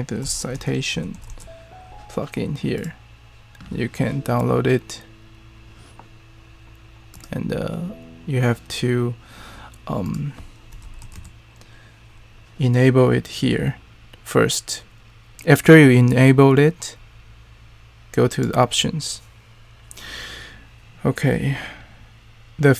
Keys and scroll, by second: 0.0-1.7 typing, 3.5 typing, 10.4-11.6 typing.